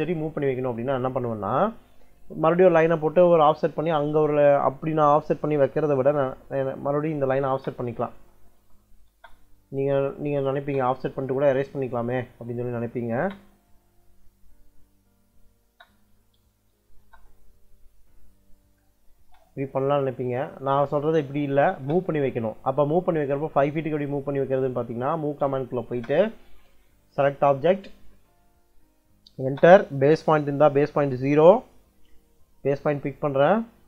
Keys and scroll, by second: 7.1-11.1 typing, 9.9 Escape, 12.3 Escape, 12.8 o, 13.0 space, 14.6 Escape, 15.2-16.9 typing, 19.1 space, 21.5 e, 21.7 space, 25.3 m, 25.7 space, 29.3 space.